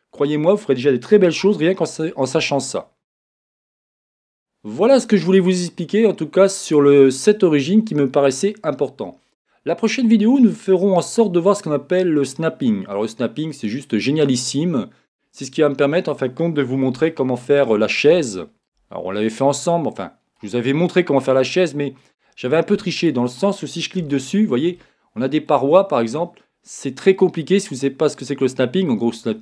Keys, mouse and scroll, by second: 0.0-16.5 middle drag, 2.5 scroll, 2.8-3.2 scroll up 1, 16.5 right click, 16.5-17.1 scroll, 17.1-23.1 shift+middle drag, 17.8-18.3 scroll, 18.9-19.4 scroll, 20.6-21.1 scroll up 1, 22.2-23.1 scroll up 1, 23.1 click, 24.0 Tab, 24.8-29.4 shift+middle drag, 25.6-26.2 scroll up 1, 26.2-27.3 scroll down 1.